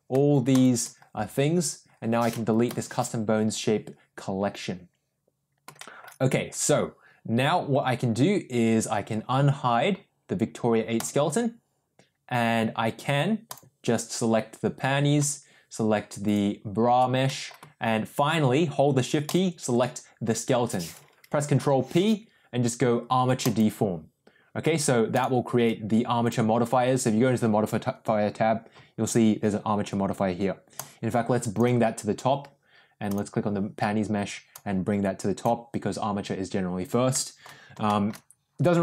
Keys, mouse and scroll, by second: 0.5 shift+click, 2.8 Delete, 5.7 middle drag, 10.9 click, 16.2 shift+click, 17.2 middle drag, 19.2 shift+click, 21.5 ctrl+p, 25.1 click, 26.2 click, 30.7-31.6 drag, 33.0 click, 34.5-35.4 drag, 37.1 middle drag, 37.8 shift+middle drag.